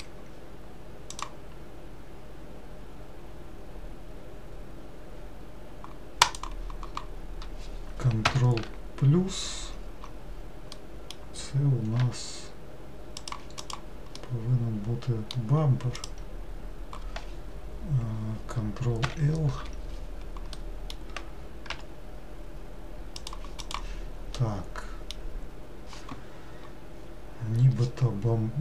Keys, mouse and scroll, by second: 1.3-8.2 right drag, 8.4 ctrl+KP_Add, 12.1 g, 13.9 click, 14.3-16.2 middle drag, 16.2 click, 19.2 ctrl+l, 21.9 g, 23.9 click, 24.6-28.6 middle drag.